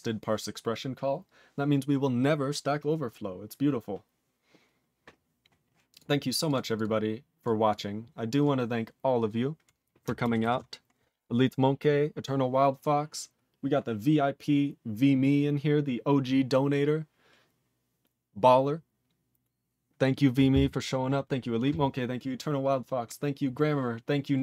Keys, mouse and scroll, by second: 5.9 click, 5.9 click, 6.5 click, 6.8 click, 7.3 click, 7.4 click, 7.6 click, 7.7 click, 8.2 click, 8.3 click, 8.4 click, 8.9 click, 10.4 ctrl+s, 10.9 scroll down 2.